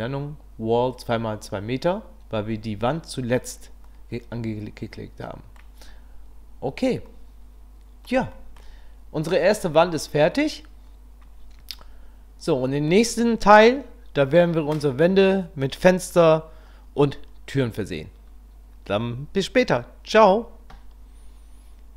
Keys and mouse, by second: 3.9-5.6 drag, 7.1-8.0 drag, 8.3 shift+middle drag, 11.8-12.9 middle drag.